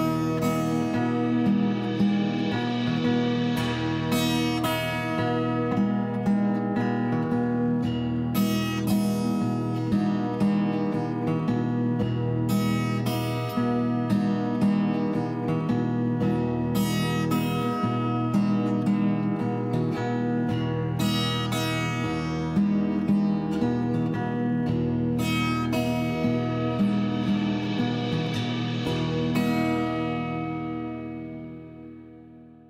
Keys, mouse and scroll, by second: 0.2 2, 0.3 0, 1.2 Return, 2.4 g, 2.6 z, 3.1 click, 3.8 click, 4.1 click, 4.6 click, 5.0 middle click, 5.7 g, 6.1 z, 7.1 click, 7.5 middle click, 8.9 middle click, 10.8-13.6 typing, 13.9 Return, 14.7 middle click, 15.8 g, 15.9 y, 16.8 click, 17.1 middle click, 17.8 g, 17.9 y, 19.5 click, 19.8 middle click, 20.6 g, 20.8 y, 21.1 click, 21.4 middle click, 22.1 g, 22.4 y, 23.3 click, 23.6 middle click, 25.3 middle click, 26.9 Tab, 28.0 d, 28.6 Return, 29.0 z, 30.0 click, 31.6 d, 31.9 Return, 32.1 Tab.